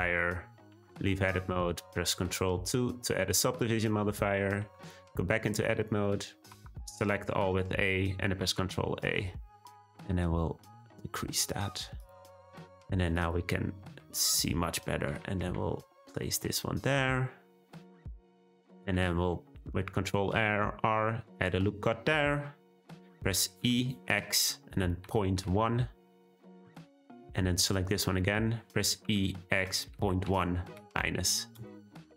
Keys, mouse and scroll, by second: 0.7 Tab, 2.5 ctrl+2, 4.6 Tab, 6.5 a, 8.4 ctrl+a, 12.3 shift+middle click, 13.2 click, 13.6-15.1 scroll up 2, 15.1 g, 18.8 r, 23.6 e, 27.6 click, 29.0 e.